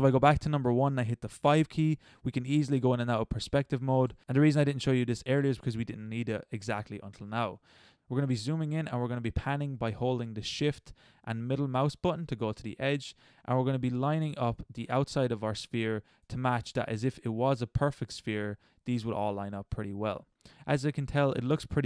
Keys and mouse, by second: 0.2 KP_1, 1.4 KP_5, 3.4 KP_5, 4.1 KP_5, 7.9-8.3 middle drag, 8.3-8.9 middle drag, 11.4 middle click, 11.7 middle click, 12.0 middle click, 12.1 middle click, 12.6-14.2 middle drag, 14.5 click, 14.5 middle click, 15.3 click, 16.1 middle click.